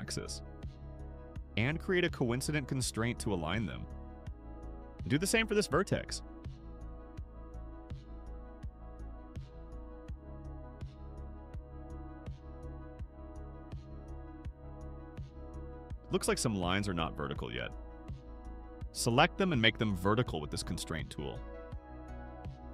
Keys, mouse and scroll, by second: 4.0 click, 5.8-8.3 drag, 9.0 click, 11.1 click, 12.1 click, 13.4 click, 15.7-18.2 drag, 18.8 click, 19.5 click, 21.4 click, 22.5 click.